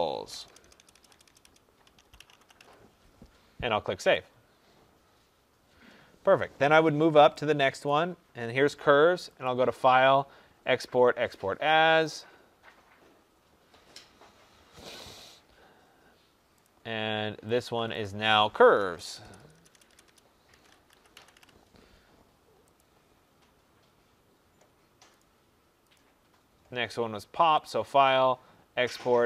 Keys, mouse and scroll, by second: 0.2-5.0 typing, 9.3 click, 12.1 click, 13.8 click, 15.1 click, 16.5 click, 17.5 click, 17.9 click, 18.8-21.7 typing, 24.3 typing, 25.8 click, 27.6 click.